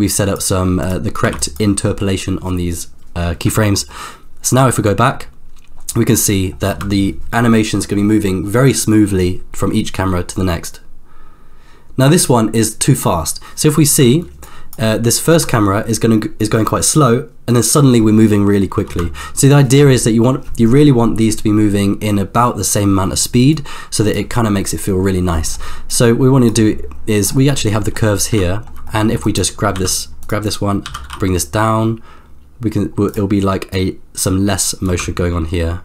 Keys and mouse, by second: 0.4 click, 1.2 b, 4.5-6.4 drag, 6.9 space, 13.9 space, 14.5-15.0 drag, 15.3 space, 18.9 space, 23.5-24.4 drag, 25.9 click, 27.7 middle click, 28.5 ctrl+middle click, 28.8 middle click, 29.7 g, 30.4 click, 30.8 g, 33.8-34.8 drag, 35.0 space.